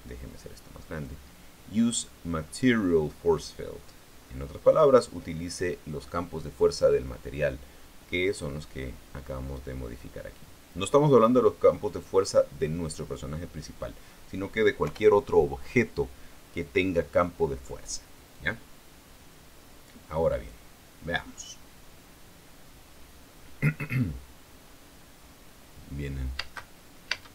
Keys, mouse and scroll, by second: 0.6-1.9 drag, 7.5 click, 11.6-13.1 drag, 14.3-15.6 drag, 15.6 p, 27.1 space.